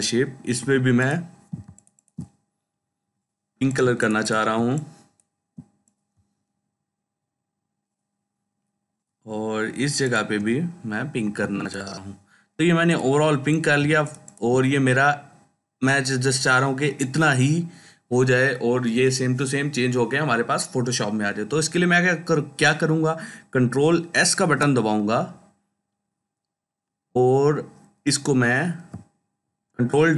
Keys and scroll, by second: 0.4 i, 3.7 ctrl+space, 4.4-5.4 ctrl+space, 11.1 i, 13.7 ctrl+space, 24.2 ctrl+s, 30.0 ctrl+w.